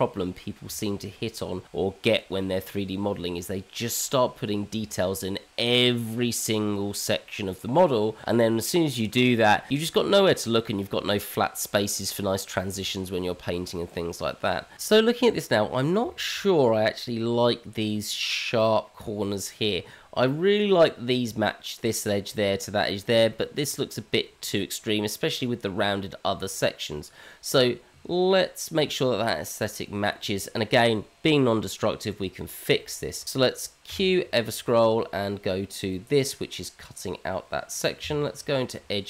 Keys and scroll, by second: 33.8 q, 38.0 Tab.